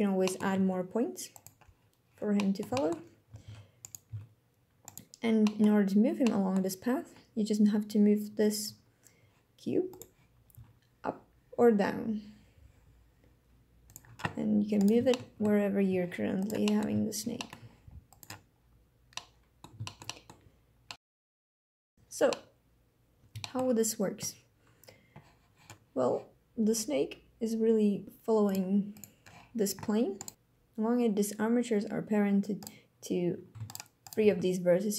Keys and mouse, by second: 0.2 click, 0.5 e, 1.3 click, 2.4 click, 2.8 click, 3.4 ctrl+Tab, 4.1 Tab, 4.8 click, 5.4 click, 6.2 click, 8.6 n, 10.5 g, 13.8 drag, 14.7 click, 15.0-15.4 shift+drag, 15.8 g, 16.4 drag, 16.7 click, 17.1 shift+middle drag, 17.3 click, 17.6 g, 18.1 click, 19.1-19.6 drag, 19.8 shift+middle drag, 20.1 click, 20.9 click, 22.2-23.2 drag, 23.4 shift+drag, 28.4 click, 28.9 click, 30.3 g, 32.5 click, 33.6 shift+click, 34.0 shift+click, 34.2 g.